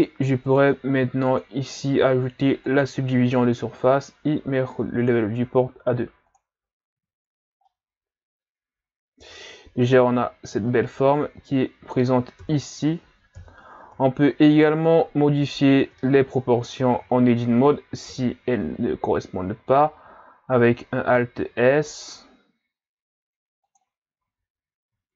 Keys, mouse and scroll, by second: 0.5 click, 1.3-4.3 drag, 5.0-7.0 drag, 7.0 a, 7.7-10.7 middle drag, 12.4 KP_3, 13.4 KP_1, 14.1-14.6 shift+scroll up 2, 14.6 right click, 15.8 Tab, 16.5 a, 16.9 a, 17.1 a, 18.1 alt+s, 24.2 Tab, 24.8 a.